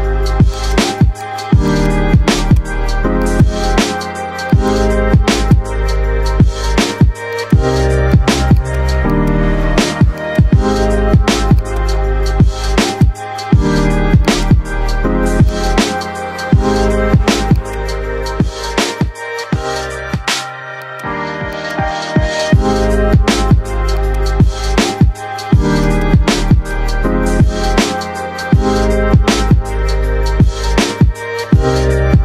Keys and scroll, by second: 6.2 shift+Page_Up, 22.1 shift+F2.